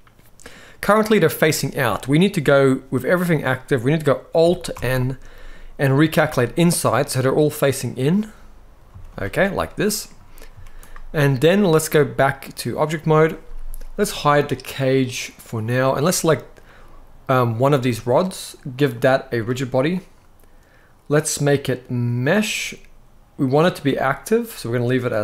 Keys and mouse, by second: 1.5 middle click, 4.4 alt+n, 6.6-7.8 middle drag, 8.6 z, 9.3 middle click, 10.2 z, 12.2-12.6 drag, 15.2 click, 16.4-17.0 middle drag, 18.7 click, 21.2-22.0 drag.